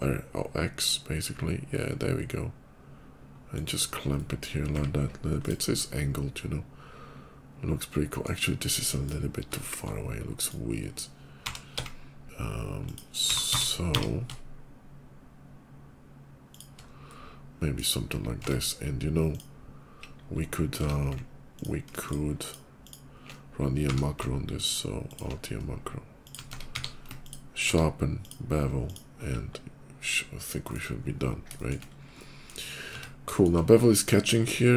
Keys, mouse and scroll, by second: 3.4 click, 3.8 middle click, 5.1 click, 5.6-8.1 middle drag, 8.4 middle click, 9.0 middle click, 9.4 shift+middle click, 10.1 shift+click, 11.3 r, 11.4 x, 11.8 r, 12.7 click, 13.1-13.9 typing, 16.3 shift+click, 16.8 shift+middle click, 18.0 Tab, 19.1 click, 20.6 Tab, 21.4 alt+click, 21.8 alt+shift+click, 22.3 click, 22.7 click, 23.5 q, 24.1 alt+q, 24.9 click, 26.1 shift+click, 26.3 Tab, 26.5 q, 26.7 Tab, 27.1 ctrl+click, 27.5 q, 28.0 click, 28.7 click, 29.3 middle click, 29.3 /, 29.8 middle click, 30.1 scroll down 1, 30.4 middle click, 30.7-31.0 scroll up 2, 31.1 middle click, 31.4 shift+middle click, 31.6 shift+middle click, 32.7 Tab, 33.2 middle click, 34.0 middle click, 34.5 middle click.